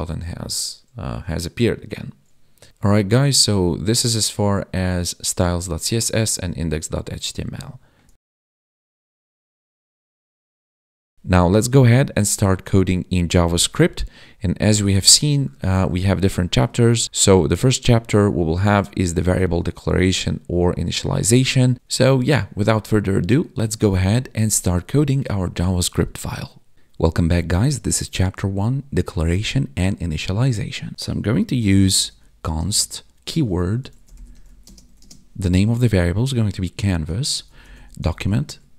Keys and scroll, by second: 11.1 ctrl+b, 13.5 ctrl+b, 15.0 ctrl+b, 32.5 space, 34.6 space, 34.9 space, 38.4 Tab.